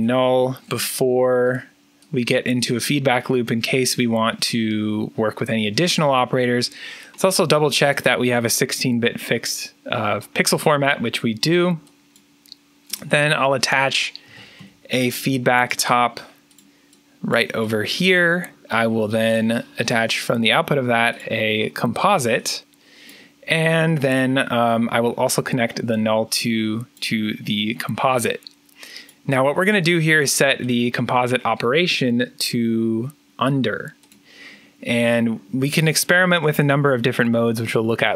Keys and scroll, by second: 0.5 alt+n, 13.9-14.9 typing.